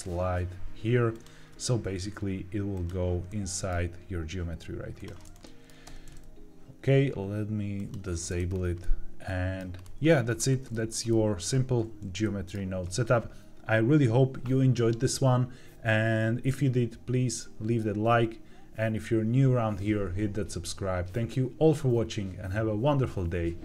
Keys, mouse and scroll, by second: 1.0 alt+click, 2.6 click, 3.2 middle click, 3.7-4.1 scroll down 1, 4.9 click, 5.3 middle click, 5.8 Tab, 7.7 click, 8.3-8.7 scroll down 3, 8.7 middle click, 9.7-10.3 scroll down 2, 10.3 scroll up 2, 10.6 shift+middle click, 11.0-11.9 middle drag, 12.1 shift+middle click.